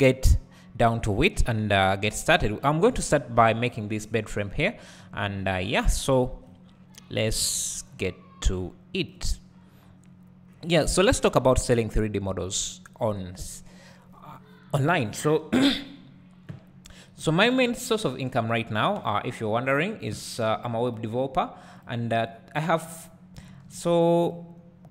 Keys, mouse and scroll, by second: 5.0-5.5 scroll up 2, 5.5-6.5 scroll down 2, 9.7-10.0 scroll up 2, 12.0 right click, 12.0 scroll up 2, 19.0 n, 20.1 t, 20.8-23.5 drag, 23.5 shift+a.